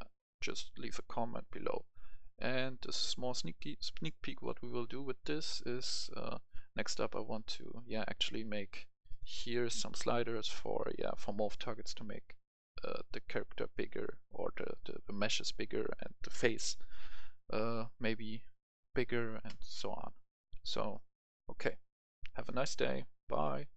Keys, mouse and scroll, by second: 0.5 F10, 5.8-7.9 right drag, 8.0 Escape, 9.0 click.